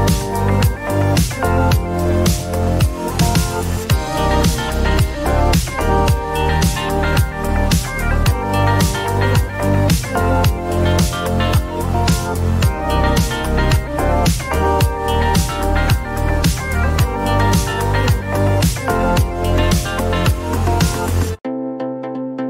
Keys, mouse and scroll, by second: 2.4 click, 10.3-12.5 typing, 17.4 click, 18.6-19.3 scroll, 19.3-20.2 scroll, 21.1-21.8 scroll, 21.8 right click.